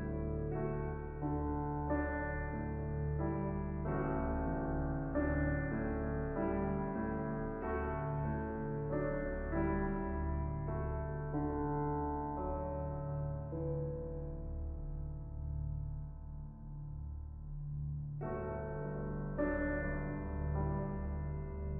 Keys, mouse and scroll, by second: 0.0 click, 0.3-3.4 middle drag, 3.4-21.7 drag.